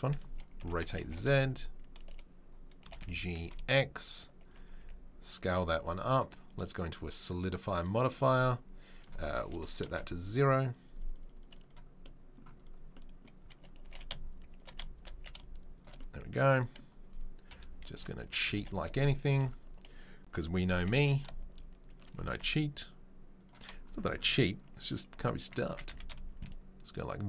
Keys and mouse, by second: 0.6 r, 2.8 g, 4.8 s, 7.8-9.1 drag, 9.1 middle click, 9.2-12.6 drag, 12.6-27.2 middle drag, 13.8 g, 17.5 KP_3, 17.9 KP_1, 18.2 KP_7, 20.7 g, 25.7 s.